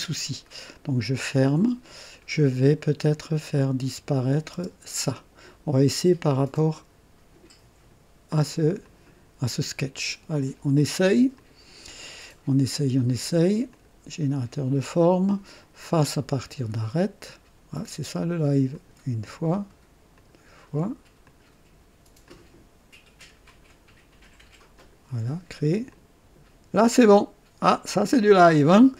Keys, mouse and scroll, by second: 0.7 click, 3.1 click, 4.5 space, 8.8 click, 9.9 click, 11.3 click, 13.7 click, 15.8 click, 18.7 click, 20.1 ctrl+click, 21.2 ctrl+click, 22.2 ctrl+click, 23.4 ctrl+click, 24.7 ctrl+click, 25.9 ctrl+click.